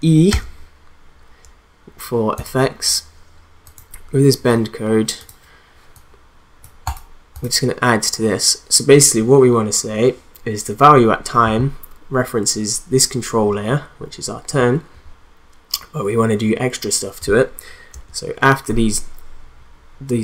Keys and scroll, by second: 17.9 space.